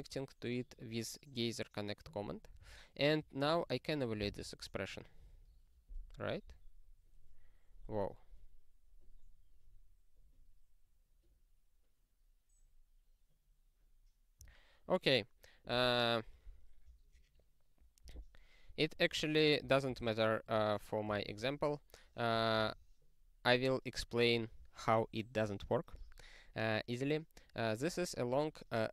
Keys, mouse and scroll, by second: 2.6 super+o, 4.3 ctrl+e, 6.6 click, 14.4 q, 15.7 click, 18.1 click, 19.6 ctrl+p, 19.8 ctrl+e, 21.2 ctrl+=, 22.6 ctrl+g.